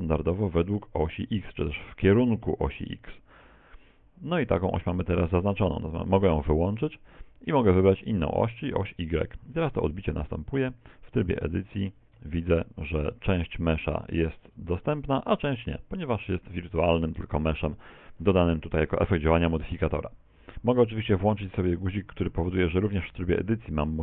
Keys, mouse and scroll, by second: 6.1 click, 8.6 click, 9.9 middle click, 10.7 z, 11.1 middle click, 12.2 Tab, 12.2 a, 12.6 middle click, 13.1 z, 13.8-14.3 scroll up 4, 14.3 shift+middle click, 14.7 right click, 15.4 right click, 16.2 z, 16.7 middle click, 18.1 middle click, 22.4 click, 23.8 right click.